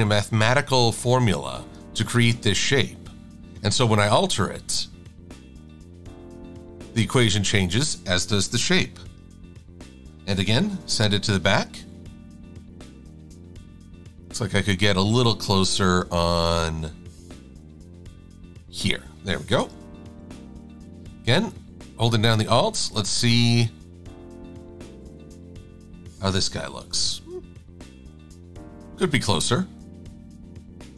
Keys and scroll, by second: 9.1 shift+x, 10.1 v, 11.1 shift+super+[, 11.5 shift+super+a, 20.1 shift+super+a, 27.4 e.